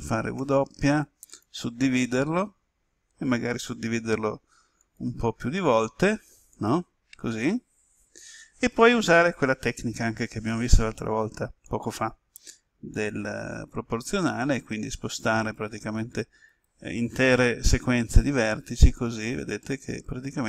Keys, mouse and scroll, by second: 0.3 w, 1.2 click, 16.4 right click, 18.0 g.